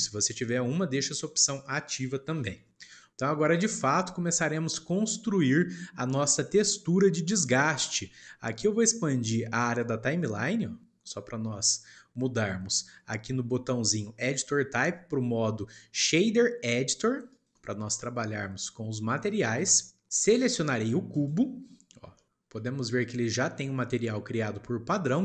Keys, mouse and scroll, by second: 2.7 shift+middle click, 3.4-6.4 shift+middle drag, 7.3-9.7 shift+middle drag, 9.7-12.8 drag, 14.1-17.3 drag, 18.9-20.0 shift+middle drag, 21.1 click, 22.1 shift+middle click, 22.7 scroll up 1, 23.6-24.0 scroll up 9, 24.0-25.2 shift+middle drag.